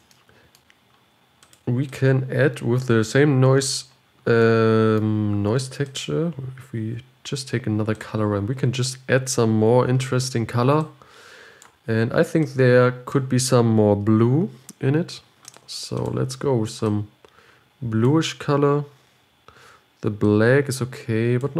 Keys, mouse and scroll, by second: 7.3 shift+d, 11.1-12.1 drag, 12.9 click, 17.4 click.